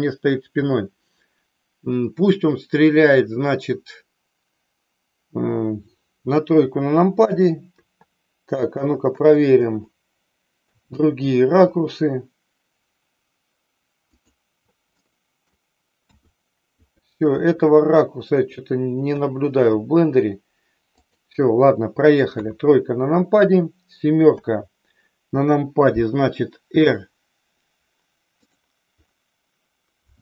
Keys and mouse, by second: 7.2 KP_5, 7.6 KP_6, 8.8-11.5 typing, 14.1 click, 15.1 middle click, 16.1-19.7 typing, 21.1 click, 22.3 KP_3, 24.2 KP_7, 26.7 r, 28.3 click.